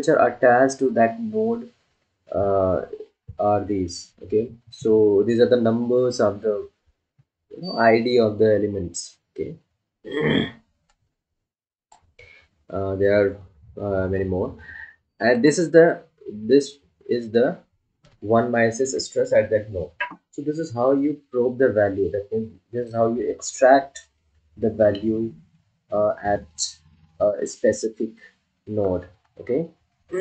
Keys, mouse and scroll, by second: 11.0-15.8 drag.